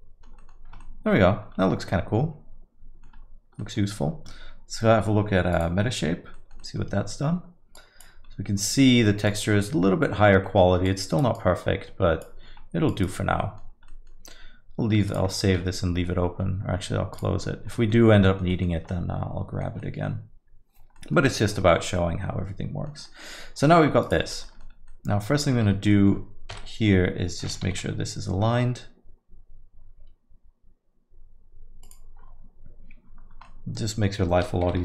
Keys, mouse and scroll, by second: 0.4 middle click, 0.8 alt+middle click, 1.4 scroll up 1, 1.6 alt+middle click, 3.3 scroll up 1, 3.6 alt+middle click, 17.8 middle click, 18.0-18.8 scroll down 3, 18.2 alt+middle click, 18.5 middle click, 18.9 alt+middle click, 19.8 middle click, 21.0 middle click, 21.1 alt+middle click, 21.6 alt+middle click, 22.0 middle click, 23.2 middle click, 23.6 alt+middle click, 24.0 click, 24.9 Tab, 25.0 alt+middle click, 25.8 a, 25.9 middle click, 26.5 KP_1, 28.0 g, 33.3 scroll down 1, 33.5 middle click.